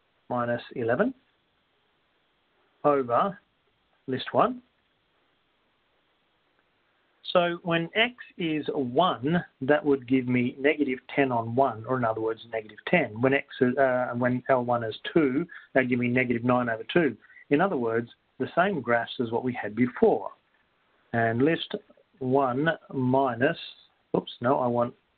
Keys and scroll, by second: 0.5 -, 1.5 1, 2.0 1, 4.0 Down, 6.0-7.5 typing, 10.3-11.0 typing, 19.8-20.5 typing, 23.5 1, 25.0 Down.